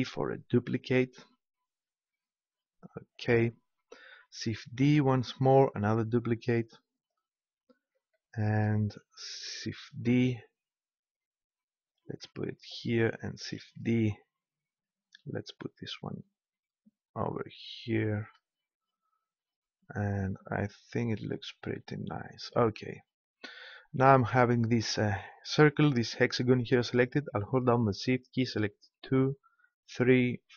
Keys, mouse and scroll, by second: 3.2-5.1 drag, 4.7 shift+d, 7.1-8.7 drag, 9.9 shift+d, 12.1-13.7 drag, 13.7 shift+d, 18.2-19.8 drag, 28.9-30.5 right drag.